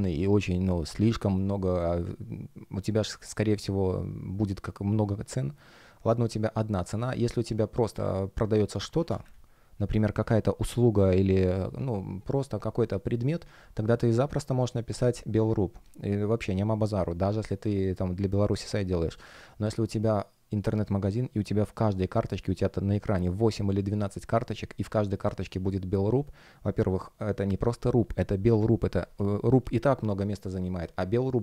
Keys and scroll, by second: 10.6 space.